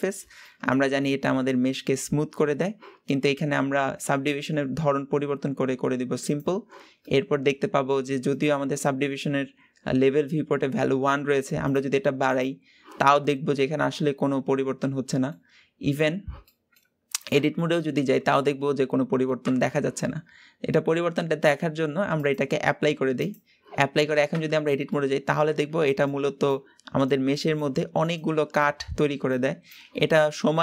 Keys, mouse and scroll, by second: 0.4-3.4 middle drag, 6.2 click, 7.0-10.0 middle drag, 11.6-13.1 drag, 13.1-15.5 middle drag, 15.5-15.8 scroll up 1, 16.4-17.4 middle drag, 17.4 Tab, 18.0-19.4 middle drag, 19.4 Tab, 22.1-24.3 drag, 24.3 Tab, 24.9-30.6 middle drag.